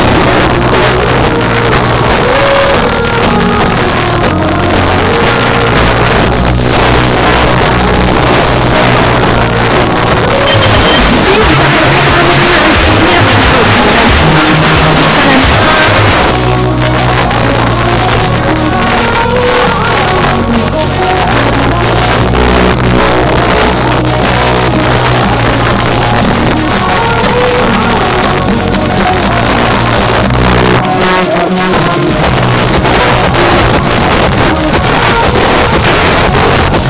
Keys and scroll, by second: 16.1 Page_Down.